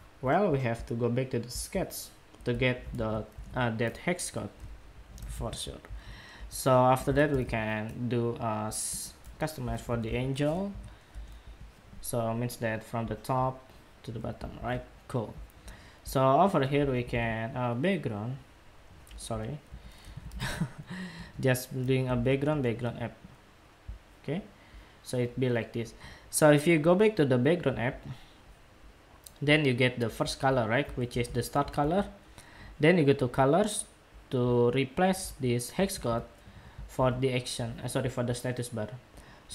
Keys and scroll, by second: 2.6 super+c, 3.1 super+Tab, 5.0 super+v, 14.2 super+w, 30.8 super+c, 31.6 super+w, 35.6 super+v, 36.8 super+w.